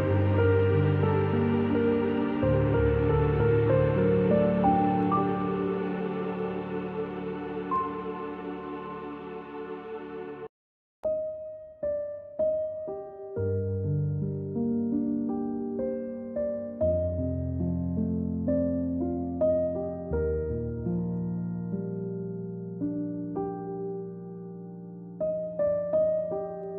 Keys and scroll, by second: 8.1 ctrl+x, 13.8-15.5 typing, 16.8 ctrl+shift+v, 20.1 z, 21.3-21.9 typing.